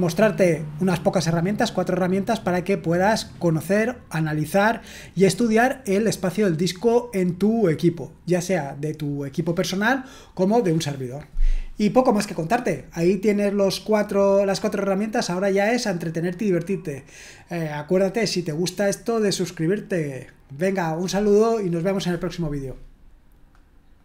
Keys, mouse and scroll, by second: 23.9 click.